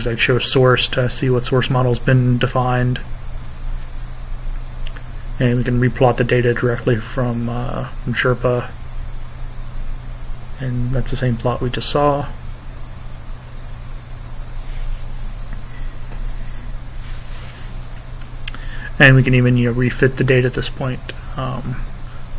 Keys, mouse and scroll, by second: 2.4-6.1 typing, 6.2 shift+Return, 10.3 click, 14.0 click, 14.9-22.1 typing.